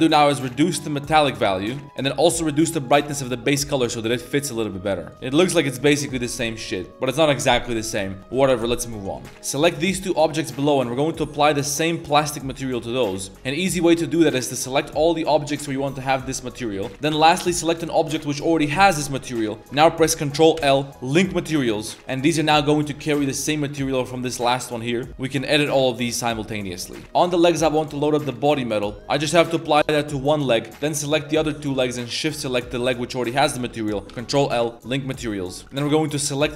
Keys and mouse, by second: 0.3-1.8 drag, 1.8 a, 2.2 drag, 6.8-7.1 middle drag, 9.2 middle click, 9.3 z, 9.5 click, 10.1 shift+click, 10.9-12.4 drag, 12.6 z, 12.8 middle drag, 13.3 ctrl+z, 13.8 click, 14.6 click, 15.2 shift+click, 15.5 shift+middle click, 16.1 middle click, 16.7 middle drag, 17.5 shift+click, 17.8 shift+middle click, 20.6 ctrl+l, 21.8 middle click, 22.0 a, 22.1 a, 22.5 shift+click, 22.9 a, 23.0 a, 23.6 click, 27.0-28.4 drag, 28.9 a, 29.1 click, 30.7 click, 31.4 shift+click, 32.1 shift+click, 32.6-32.9 middle drag, 34.1 ctrl+l, 35.0 middle drag, 35.3 a, 35.5 a, 35.5 middle click, 35.7 c.